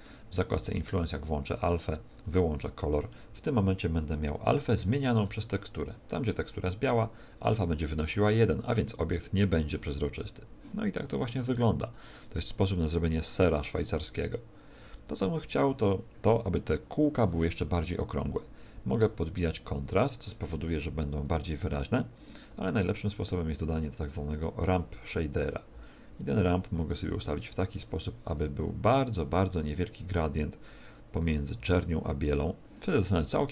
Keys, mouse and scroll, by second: 1.1 click, 2.2 click, 5.2-7.0 scroll up 7, 7.0-7.4 scroll up 2.